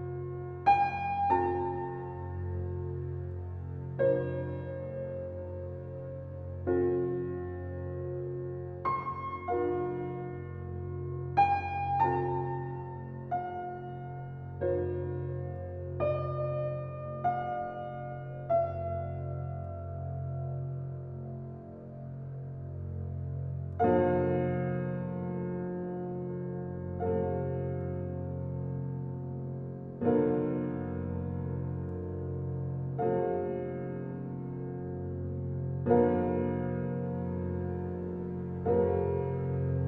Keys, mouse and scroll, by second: 1.7 ctrl+alt+z, 4.4 ctrl+shift+z, 5.8 alt+click, 9.7 ctrl+alt+z, 10.4-12.2 alt+right drag, 12.2 alt+click, 14.0-17.5 drag, 17.5-23.1 drag, 25.9-27.4 drag, 27.4 ctrl+alt+z, 28.2 alt+click, 31.4-34.2 drag, 34.9 click, 35.6 ctrl+alt+z, 36.7 alt+click, 38.2-39.8 drag.